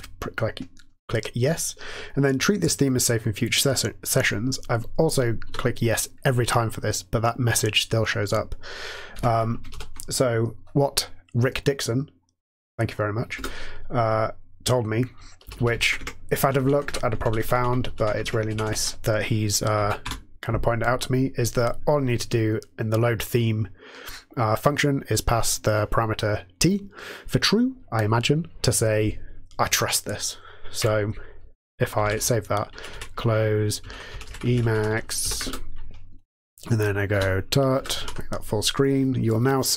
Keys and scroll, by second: 5.5 y, 8.9-9.6 typing, 9.7 Down, 13.3 Return, 15.4 Down, 15.5 Down, 16.4 Down, 16.5 Down, 16.8 Tab, 17.2 Down, 17.3 Down, 17.5 Down, 17.7 Down, 18.1 ctrl+e, 18.4 Left, 18.6 Left, 19.7 space, 20.0 t, 32.0 ctrl+x, 32.0 ctrl+s, 32.6 ctrl+x, 32.9 ctrl+c, 33.8 super+d, 33.8-35.6 typing, 37.1-38.0 typing, 38.0 super+f.